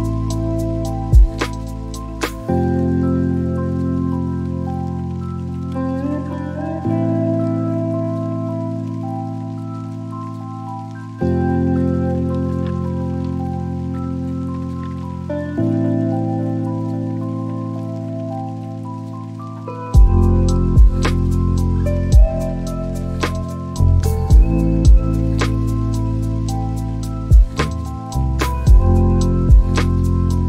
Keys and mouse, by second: 3.4 click, 5.4-9.2 drag, 14.4 click, 17.6 click, 18.8 click, 21.2 click, 22.8 click, 23.5 click, 28.9 drag.